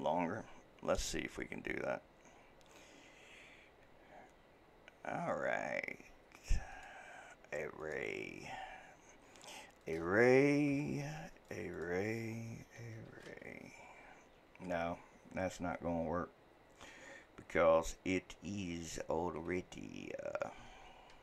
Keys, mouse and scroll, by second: 6.7-11.5 drag, 11.8-21.2 drag.